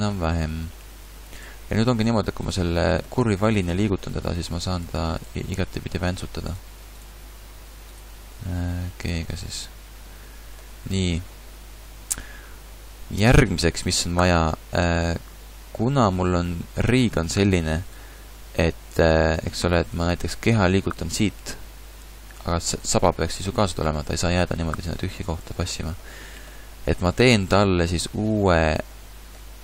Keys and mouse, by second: 1.1 r, 2.6 shift+middle click, 3.8 g, 6.1 g, 7.1 r, 8.3 g, 11.0-11.4 ctrl+z, 12.2 ctrl+z, 14.8 Tab, 21.4 r, 23.0 g, 25.6 a.